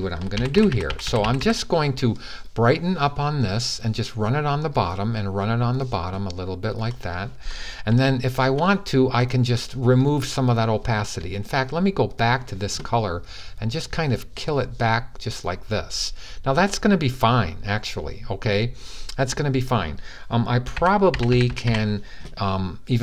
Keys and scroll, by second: 0.1-1.2 typing, 20.5-21.4 typing.